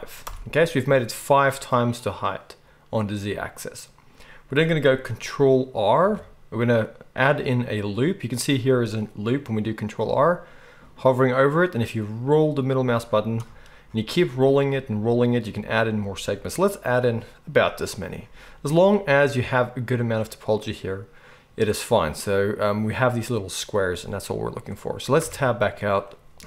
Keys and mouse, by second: 3.0-26.4 middle drag, 6.0 ctrl+r, 25.2 Tab, 26.3 KP_1.